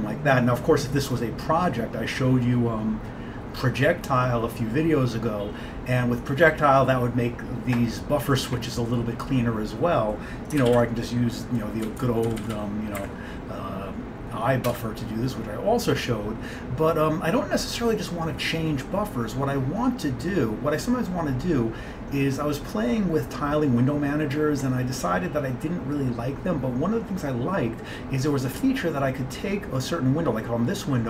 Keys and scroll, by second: 0.0-0.1 typing, 10.7 ctrl+x, 10.8 ctrl+b, 11.9 Down, 12.1 Down, 12.2 Down, 12.3 Down, 13.1 Up, 14.8 Return.